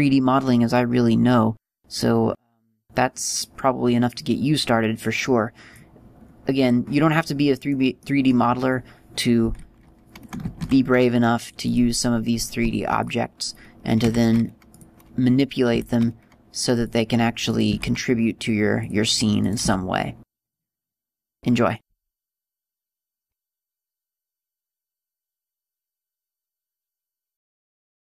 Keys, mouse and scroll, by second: 14.2-14.7 scroll down 3, 15.3 middle click, 15.3 scroll down 3, 16.1 middle click, 18.7 shift+a, 21.1 g, 21.2 click, 22.2 Tab, 22.8 right click, 23.9 e.